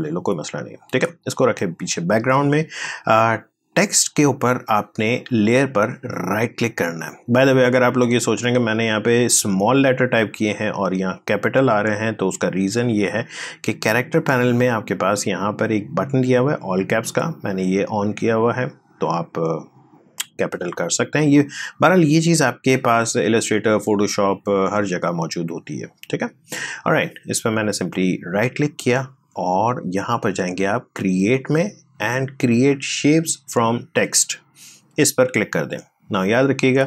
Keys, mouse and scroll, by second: 5.9 right click, 7.8 click, 12.6 click, 16.8 click, 19.3 click, 27.6 right click, 27.6 right click.